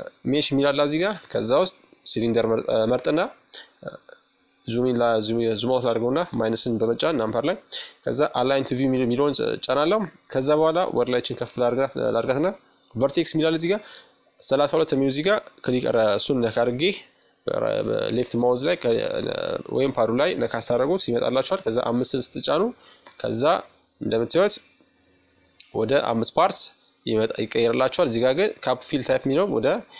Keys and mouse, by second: 1.7 KP_Subtract, 6.3-10.7 drag, 13.0-14.8 drag, 22.4 z, 27.1-29.0 drag.